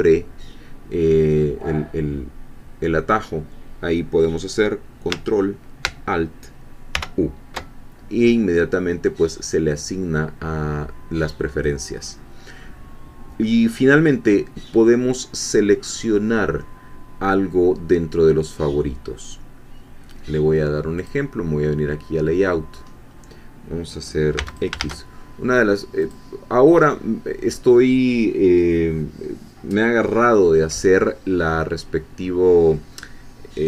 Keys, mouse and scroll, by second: 6.9 ctrl+alt+u, 11.5 scroll down 2, 12.0-12.3 scroll up 2, 12.6 scroll down 2, 21.0 click, 21.9 click, 22.7-23.1 scroll up 2, 23.1 scroll down 2, 24.4 x, 24.5 shift+click, 24.9 shift+a, 26.0 click, 26.7-27.1 scroll up 1.